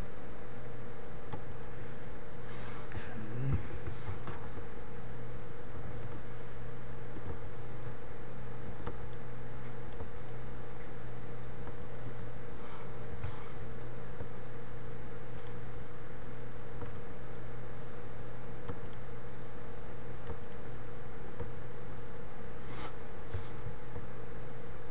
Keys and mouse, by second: 0.8-4.1 drag, 4.1 ctrl+KP_3, 5.3-6.9 drag, 7.9-13.3 drag, 13.3 KP_3, 15.0-16.8 drag, 21.1-23.1 drag, 23.1 KP_7, 24.6-24.9 drag.